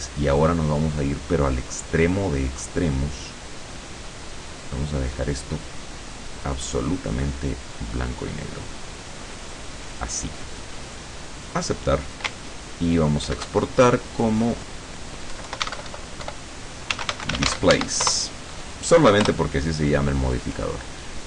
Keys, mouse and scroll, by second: 2.1 click, 4.2-6.4 drag, 7.3-10.0 drag, 11.5 click, 13.3 ctrl+shift+e, 14.4 click, 15.4 BackSpace, 15.7 Caps_Lock, 15.9 Delete, 17.0 d, 17.3 s, 17.5 a, 17.7 e, 17.8 Caps_Lock, 18.1 Return, 19.3 Return.